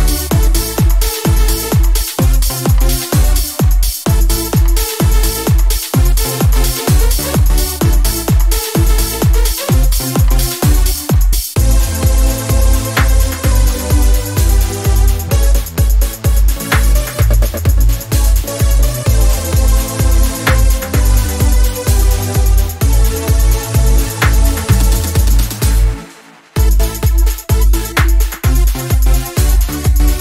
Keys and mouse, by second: 0.8-3.6 right drag, 3.6-5.3 drag, 5.3-6.1 right drag, 6.1-8.3 drag, 8.3-10.1 right drag, 10.1-10.6 drag, 10.6 middle click, 14.7 alt+d, 17.1-18.7 drag, 18.7-19.5 middle drag, 20.6-22.4 right drag, 22.4 alt+d, 25.1-25.6 middle drag, 27.9-29.3 drag, 29.3 middle click, 29.7 click.